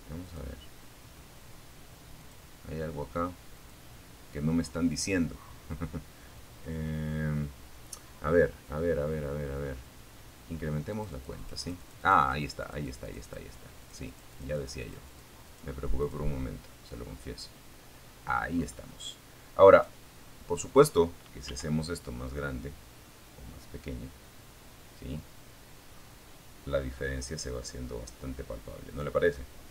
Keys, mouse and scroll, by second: 0.4 click, 1.8 click, 3.1 click, 9.1-11.7 drag, 12.0-13.6 drag, 13.6 click, 14.2 click, 15.0 scroll down 1, 15.3-17.2 middle drag, 17.9 right click, 18.4-19.0 scroll down 1, 19.6 s, 28.5 click.